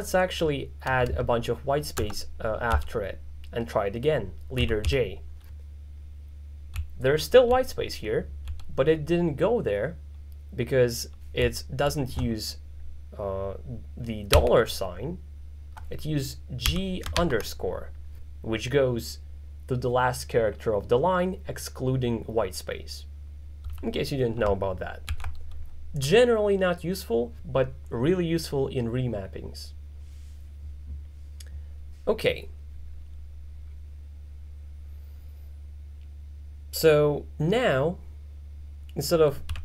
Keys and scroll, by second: 1.1 space, 4.4-5.4 typing, 6.8-8.5 typing, 11.5-11.9 typing, 14.4 shift+4, 16.7 g, 17.2 shift+-, 23.7 l, 25.1 shift+d, 39.3-39.6 typing.